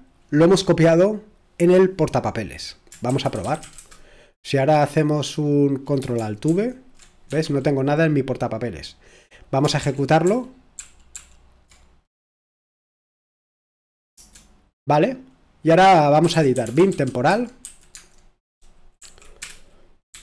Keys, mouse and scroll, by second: 2.8-4.1 typing, 6.5 ctrl+alt+v, 7.3 Escape, 7.5 typing, 9.8 ctrl+p, 9.8 typing, 10.2 ctrl+p, 16.2 c, 18.7-19.9 typing, 20.1 Return.